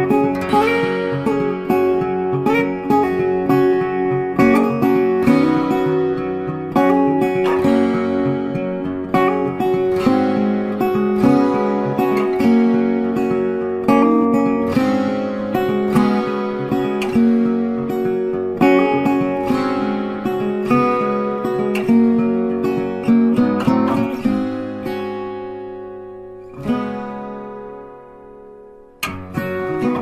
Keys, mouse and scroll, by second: 0.6 space, 0.6 double click, 0.8 space, 1.9 ctrl+space, 2.5 ctrl+click, 2.7 ctrl+click, 3.1 shift+click, 4.1 double click, 6.9 ctrl+space, 7.0 ctrl+click, 7.2 ctrl+space, 7.8 space, 7.9 ctrl+click, 8.3 ctrl+click, 8.6 ctrl+click, 9.0 ctrl+click, 10.0 ctrl+click, 11.7 space, 12.1 ctrl+click, 17.0 ctrl+space, 17.1 ctrl+click, 17.3 ctrl+space, 18.3 space, 20.0 alt+shift+click, 21.8 alt+shift+click, 22.0 alt+shift+click, 22.4 right click, 23.1 double click, 24.0 shift+click, 24.4 alt+scroll up 2, 24.9-25.6 alt+scroll, 27.6 space, 27.7 double click, 27.9 space, 28.5 scroll up 1.